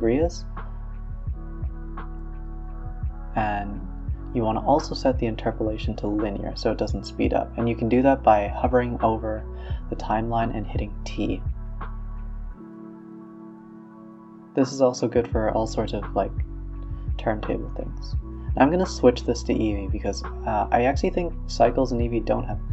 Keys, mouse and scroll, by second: 1.3 z, 1.9 space, 3.3-3.7 drag, 3.7 z, 4.5 scroll down 1, 4.8 space, 4.9 scroll up 2, 5.2-5.7 scroll down 1, 5.7 click, 6.4 scroll down 1, 6.6-8.2 scroll up 1, 8.2-8.7 scroll up 7, 8.7-9.7 scroll down 4, 10.0 click, 10.5 click, 11.2 click, 14.0 scroll down 3, 14.3 space, 17.4 s, 19.8 click, 19.9-21.6 scroll up 2, 21.6-22.0 middle drag, 22.0-22.7 scroll up 1.